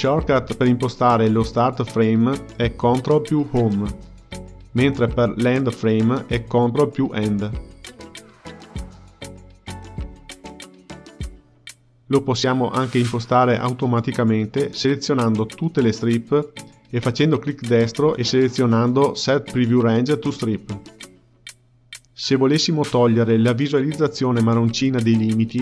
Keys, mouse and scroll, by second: 0.0 g, 2.0 Page_Up, 4.6 ctrl+Home, 7.2 Page_Up, 8.7 ctrl+End, 11.3 click, 13.8-15.9 drag, 17.4-20.6 right drag, 24.0 click, 25.1 click.